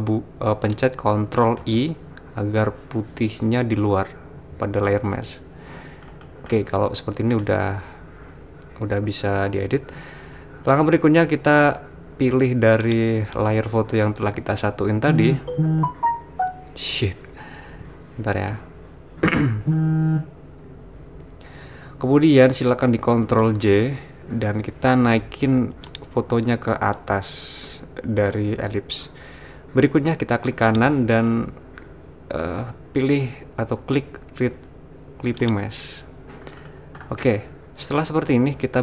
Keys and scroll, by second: 1.6 super+i, 23.4 super+j.